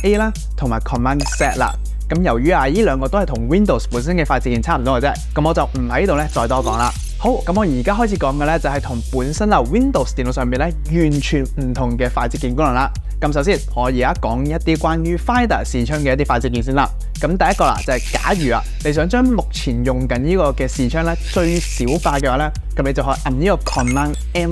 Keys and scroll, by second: 4.2 super+z, 24.3 super+m.